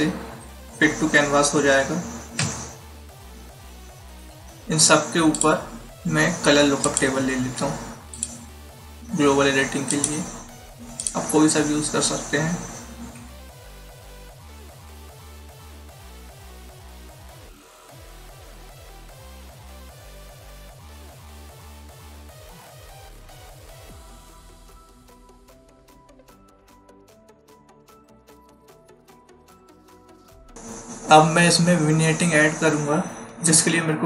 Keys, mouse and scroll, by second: 2.3 ctrl+0, 5.3 click, 13.3 Down, 14.9 Down, 15.8 Up, 18.4 click, 22.6 click, 24.6 click, 25.4 click, 28.6 click.